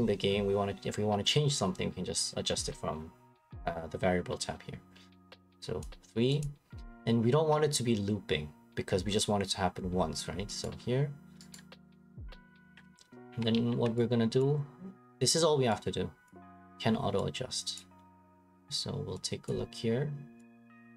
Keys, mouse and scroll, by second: 5.8 click, 6.4 click, 10.6 right click, 11.5 right click, 12.3 click, 13.3 ctrl+c, 13.5 ctrl+v, 14.4 click, 15.2 click, 16.3 click, 17.8 click, 18.6 click, 19.5 click, 20.8 click.